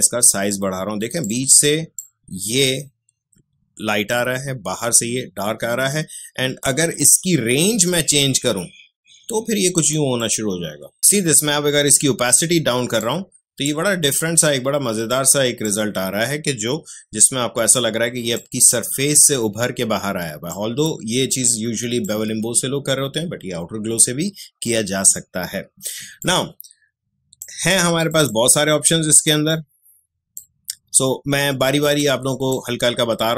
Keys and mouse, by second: 7.9-15.6 drag, 17.3 space, 17.7 click, 17.8 space, 20.4 click, 20.8 space, 26.2-33.3 drag.